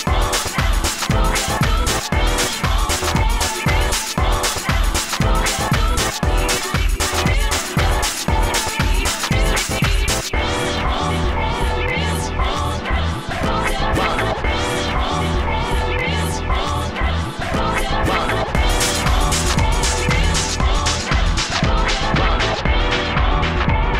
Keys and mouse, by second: 0.0-0.5 drag, 1.7-4.1 drag, 7.1 drag, 7.5-7.9 drag, 12.0 s, 12.6 n, 13.4 n, 15.1 shift+f, 17.9 s, 18.1 f, 18.4 f, 19.2 shift+f, 21.7-23.9 typing.